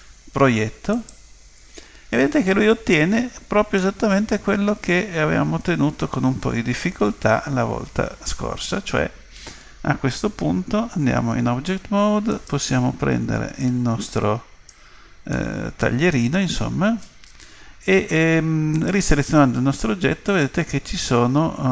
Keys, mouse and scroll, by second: 0.9 click, 3.8-5.8 middle drag, 11.1 Tab, 12.3 right click, 13.6 click, 15.3-17.3 middle drag, 15.4 click, 18.7 right click, 19.3 Tab.